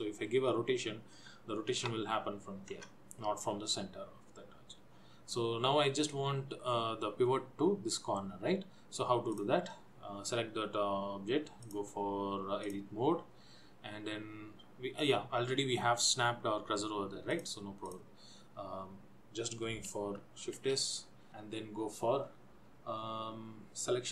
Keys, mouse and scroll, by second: 9.5 click, 11.9 click, 17.6 click, 20.8 shift+s.